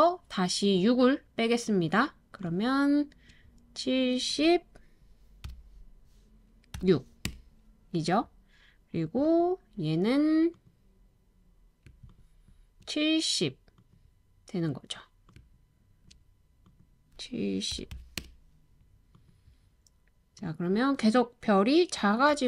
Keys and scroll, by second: 5.5 typing, 6.7 typing, 7.2 Return, 17.5-18.4 typing, 22.3 super+c.